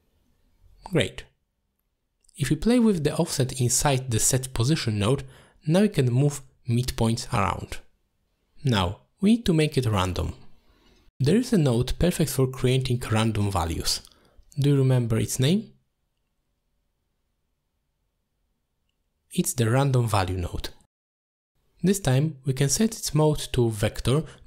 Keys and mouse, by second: 1.6-2.3 drag, 3.2 middle click, 3.6-4.0 drag, 4.5 click, 5.8-8.2 shift+drag, 8.6-9.6 drag, 12.9 middle click, 14.3 click, 17.3-22.7 drag, 23.0 middle drag.